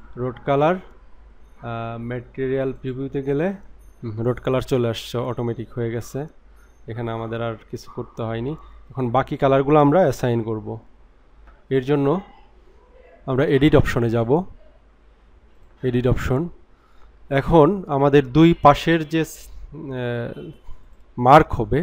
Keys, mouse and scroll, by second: 2.9 click, 4.4 middle click, 14.2 click, 20.8 click.